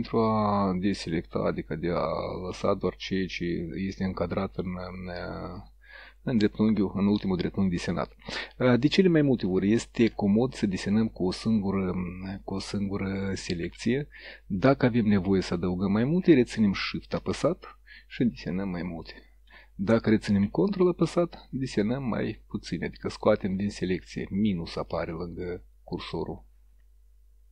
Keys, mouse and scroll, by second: 10.4 click, 11.7-12.5 drag, 13.3-14.2 drag, 15.0-15.9 drag, 17.8-18.5 shift+drag, 18.7-19.5 shift+drag, 21.0-21.9 ctrl+drag, 22.4-23.4 ctrl+drag, 25.0-26.0 ctrl+drag.